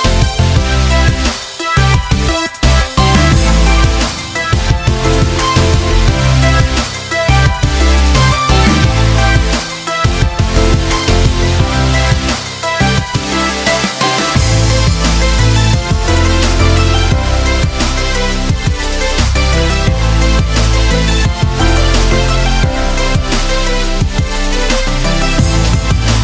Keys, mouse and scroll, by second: 1.1 click, 1.1 a, 4.8 ctrl+space, 5.4 click, 7.9 click, 16.3-17.3 typing, 18.5-26.2 drag.